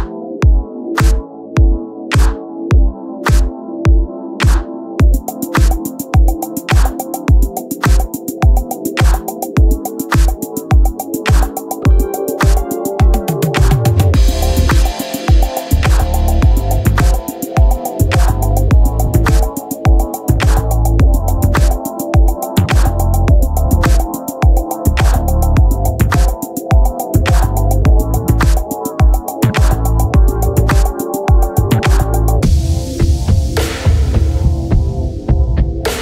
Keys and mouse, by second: 3.1 click, 6.1 click, 11.7 click, 13.5 click, 16.4 click, 18.9 click, 21.2 click, 23.8 click, 30.5 click, 32.5 click.